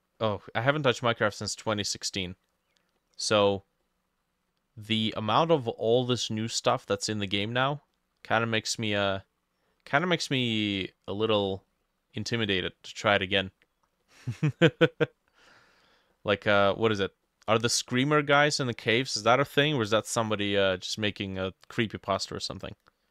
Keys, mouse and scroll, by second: 0.2 middle click, 1.2 middle click, 1.7 middle click, 2.3 middle click, 3.3 middle click, 4.9 middle click, 5.4 middle click, 6.0 middle click, 6.8 middle click, 8.0 middle click, 8.6 middle click, 9.2 middle click, 10.1 middle click, 10.7 middle click, 12.2 middle click, 12.7 middle click, 13.4 middle click, 14.1 middle click, 14.6 middle click, 14.9 middle click, 15.5 middle click, 16.2 middle click, 16.7 middle click.